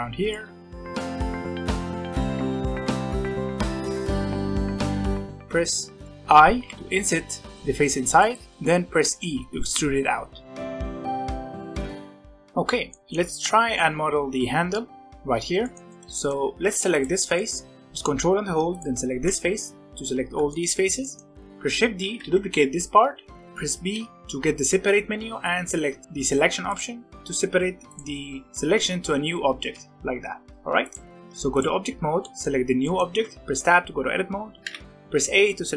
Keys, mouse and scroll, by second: 1.9 ctrl+r, 2.8 middle click, 3.0 3, 3.6 c, 4.5 ctrl+click, 4.8 shift+click, 5.1 middle click, 5.5-6.0 scroll up 1, 6.0 middle click, 6.1 scroll up 1, 6.6 i, 9.0 e, 11.1 s, 12.9-15.8 middle drag, 15.8 click, 15.9 shift+middle click, 16.6 3, 16.9 click, 17.3 middle click, 17.7 scroll up 1, 17.8 middle click, 18.7 ctrl+click, 20.5 shift+middle click, 20.8 scroll up 1, 20.9-21.9 middle drag, 21.9 shift+d, 23.3 middle click, 23.8 p, 27.4 Tab, 27.8 click, 28.6 g, 30.4 Tab, 30.5 Tab, 30.8 click, 31.4 click, 32.1-32.6 middle drag, 32.6 scroll down 1, 32.8 middle click, 33.1 Tab, 34.6 a, 35.4 scroll up 2.